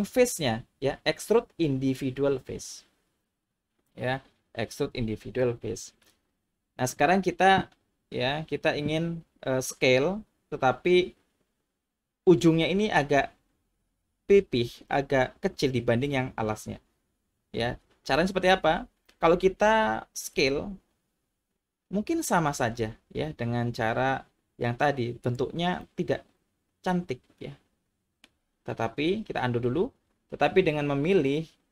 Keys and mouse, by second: 20.3 s, 25.2 click, 25.8-28.2 middle drag, 29.6 ctrl+z.